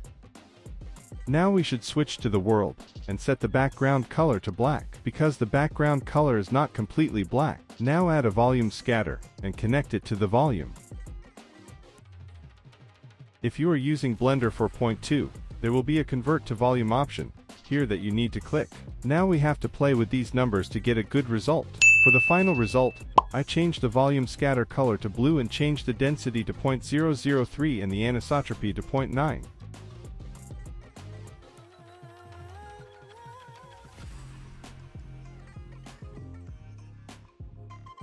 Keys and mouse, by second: 0.3 z, 1.0 middle click, 2.0 click, 3.1 z, 4.0 KP_0, 5.0 middle click, 5.8 click, 8.2 click, 8.7 click, 9.2 click, 9.5 click, 9.8 shift+a, 12.3-13.8 drag, 16.8 click, 18.3 click, 20.4 click, 20.9 click, 24.5 click, 26.5-27.9 drag, 28.5-29.8 drag, 28.7 0, 32.0-32.7 middle drag, 34.6 middle click, 35.5-36.8 middle drag, 37.0 z.